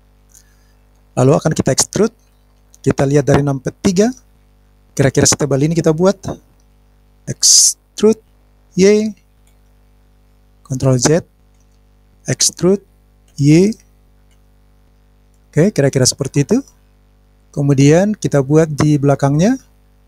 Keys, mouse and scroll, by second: 0.0 click, 3.8 KP_3, 6.5-6.9 scroll up 5, 6.9 click, 8.6 e, 10.8 ctrl+z, 12.0 ctrl+z, 13.0 e, 14.9 click, 14.9 middle click, 15.0 scroll down 1, 15.1 scroll down 3, 15.3-19.9 middle drag, 19.9 scroll up 1.